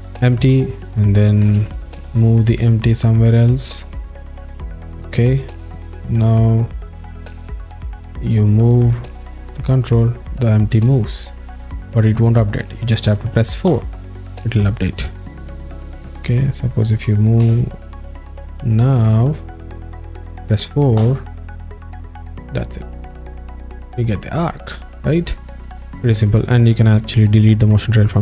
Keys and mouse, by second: 0.3 alt+shift+middle click, 0.7 w, 1.7 ctrl+Tab, 4.3 alt+middle click, 5.5 ctrl+Tab, 7.6 alt+middle click, 8.1 ctrl+Tab, 9.5 click, 13.9 4, 15.7-17.0 drag, 15.7 z, 17.4 x, 18.0 click, 19.3 click, 21.2 4, 22.4 click, 25.0-25.6 alt+middle drag, 25.8 alt+shift+middle click.